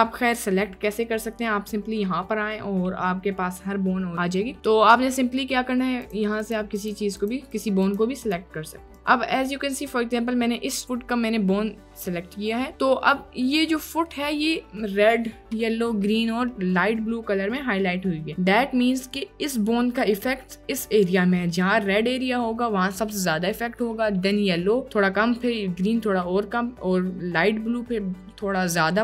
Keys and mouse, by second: 0.5 click, 4.7 click, 6.1-6.9 drag, 7.2 click, 7.9 click, 8.2-13.1 drag, 13.6 click, 14.1 click, 15.0 click, 15.5 click, 16.6 click, 17.1 middle click, 18.3 middle click, 21.4 middle click, 26.0 middle click, 26.2 click.